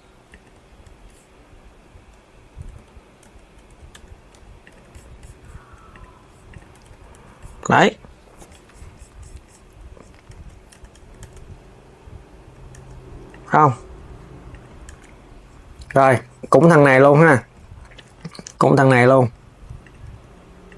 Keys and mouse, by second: 0.0 click, 0.1 KP_3, 2.4 z, 2.5 z, 3.6 Tab, 4.0 KP_3, 4.3 click, 5.6 click, 6.2 click, 6.5 s, 10.1 s, 13.0 click, 14.2 click, 14.6 Tab, 15.6 click, 16.3 Tab, 17.6 click, 17.8 KP_3, 18.3 g, 19.5 click, 19.9 g.